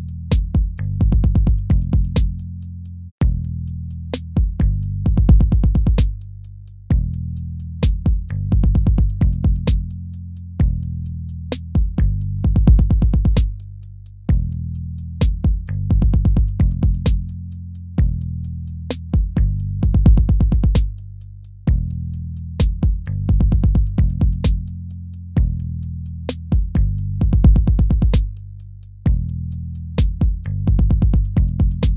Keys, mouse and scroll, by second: 3.4 ctrl+-, 7.1 ctrl+-, 21.4 ctrl+-.